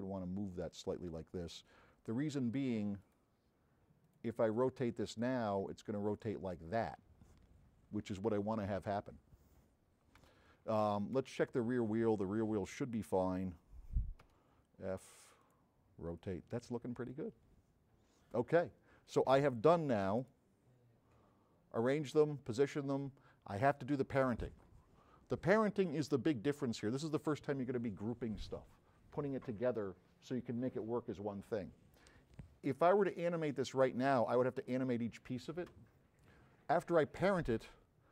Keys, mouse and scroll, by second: 3.1 click, 4.1 click, 5.3-8.3 drag, 11.5 click, 11.5 space, 15.4 click, 20.2 click, 33.5 click.